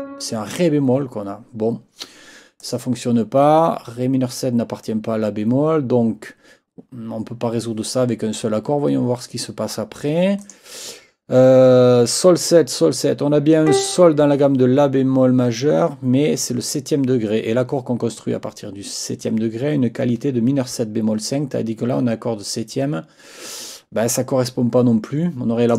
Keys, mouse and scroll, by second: 2.6 click, 10.4 click, 13.6 click, 25.7 click.